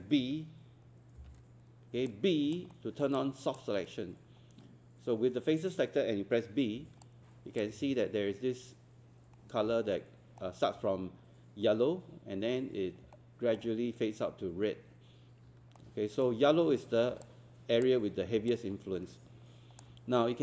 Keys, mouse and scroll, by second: 2.1 alt+click, 2.7 alt+middle click, 3.2 alt+click, 7.0 alt+click, 9.9 alt+middle click, 13.2 alt+middle click, 15.5 alt+scroll down 1, 17.2 alt+click, 18.5 alt+click.